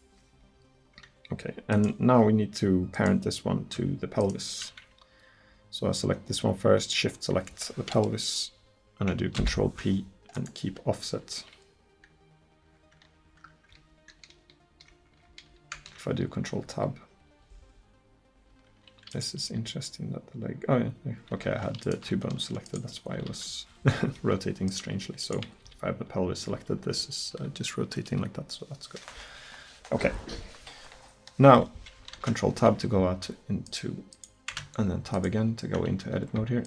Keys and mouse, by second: 0.1-6.4 right drag, 9.4 ctrl+p, 15.8 ctrl+Tab, 16.7 r, 18.3-21.4 drag, 19.5 r, 21.9-24.7 right drag, 23.2 r, 24.7-27.3 drag, 25.7 r, 32.2 ctrl+Tab, 34.6 Tab.